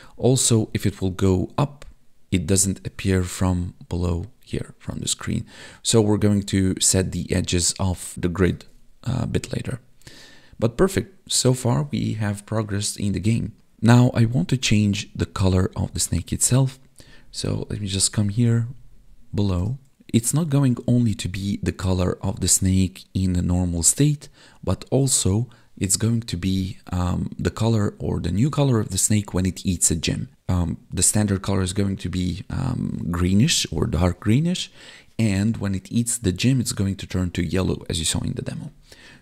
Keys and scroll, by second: 0.5 Up, 13.9 Up, 17.1 Down.